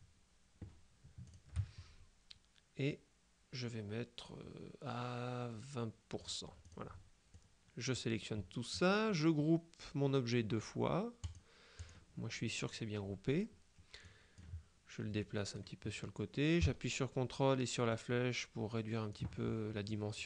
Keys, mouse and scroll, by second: 1.3 shift+click, 6.3-7.3 drag, 7.4-8.5 drag, 11.3 click, 14.1 click, 15.3-16.1 drag, 18.0-19.7 ctrl+drag, 20.0 click.